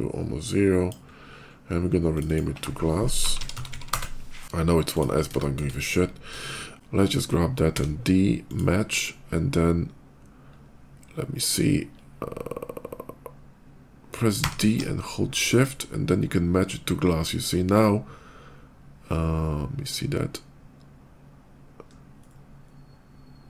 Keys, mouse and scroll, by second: 0.9 middle click, 1.1 middle click, 1.3 middle click, 1.5 middle click, 1.9 click, 2.1 click, 3.1 g, 3.2 l, 3.4 a, 3.5 s, 3.7 Return, 4.7 click, 5.2 shift+middle click, 5.6 shift+middle click, 5.7 shift+middle click, 6.2 shift+middle click, 7.6 d, 8.3 click, 10.9 middle click, 11.4 middle click, 11.9 middle click, 12.3 middle click, 13.1-14.4 right drag, 14.3 d, 14.8 middle click, 15.7 middle click, 18.9 shift+middle click, 20.3 shift+middle click, 20.9 shift+middle click, 22.0 shift+middle click, 22.5 shift+middle click, 22.9 shift+middle click, 23.2 shift+middle click.